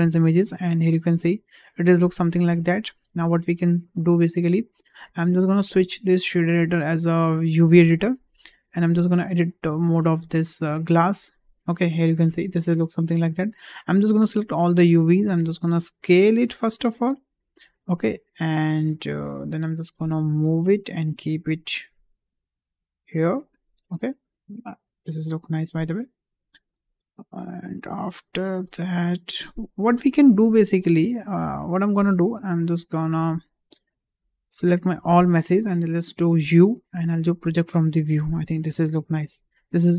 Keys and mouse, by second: 0.8-2.2 middle drag, 2.5 `, 3.6-3.9 shift+middle drag, 4.9-7.3 drag, 9.0 Tab, 9.9 Tab, 10.3 click, 10.9 Tab, 14.1 a, 15.2 s, 18.3 shift+middle click, 19.5 g, 33.3 `, 34.8 a, 36.3 u.